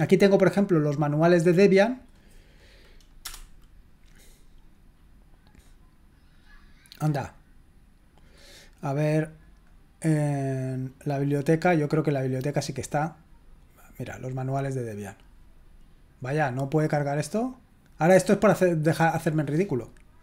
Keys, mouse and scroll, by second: 1.7 click, 3.2 Return, 5.6-7.0 drag, 9.4 click, 11.3 click, 13.9 click, 18.2-19.6 drag, 19.7 click.